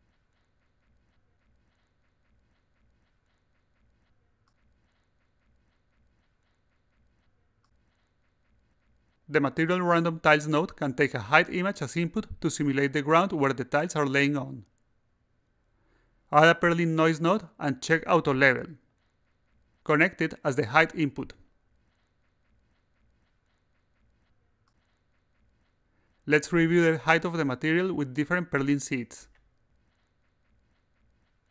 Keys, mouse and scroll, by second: 0.0-8.5 drag, 15.3 click, 16.8-19.3 drag, 20.8 click, 22.7 click, 24.5 click, 27.5 click, 28.3 click, 29.1 click.